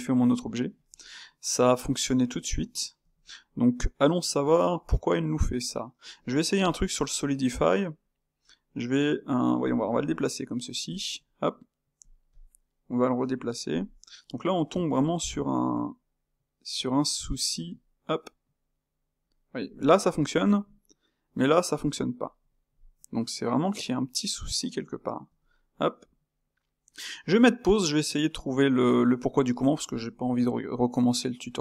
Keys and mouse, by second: 0.8 n, 1.4-2.9 middle drag, 2.9 alt+g, 3.7-6.7 middle drag, 6.7 space, 13.1 g, 13.8-14.8 middle drag, 14.8 g, 17.5 g, 21.0 g, 22.5-25.2 middle drag, 25.2 alt+g, 25.9-31.6 middle drag.